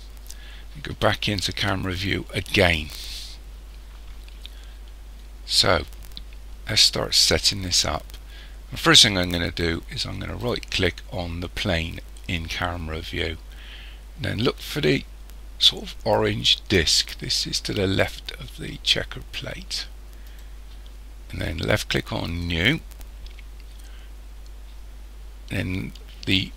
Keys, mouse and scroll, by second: 1.5 KP_0, 10.4 right click, 20.3 click, 22.3 click.